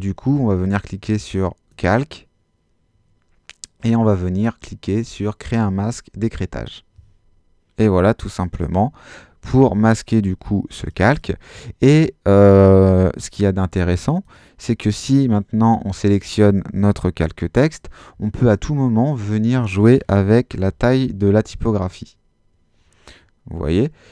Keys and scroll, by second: 20.5 l, 20.8 2, 21.5 Home.